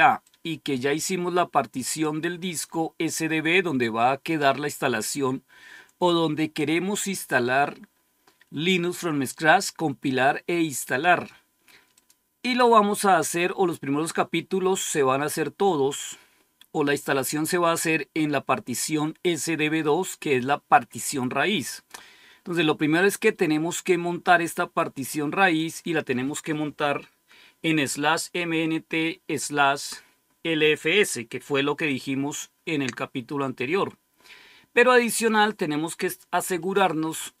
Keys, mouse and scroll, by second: 0.1-2.6 drag, 11.8 click, 21.5 click, 22.8 click, 24.8 click, 25.4 click.